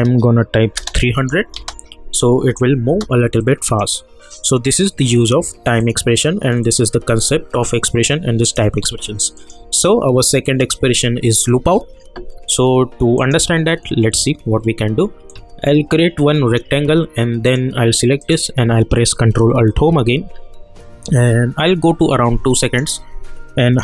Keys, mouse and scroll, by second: 1.5 space, 3.4-4.7 drag, 9.3 click, 13.1-17.4 drag, 15.6-17.4 shift+drag, 19.7 ctrl+alt+Home, 21.0 =, 22.6 click.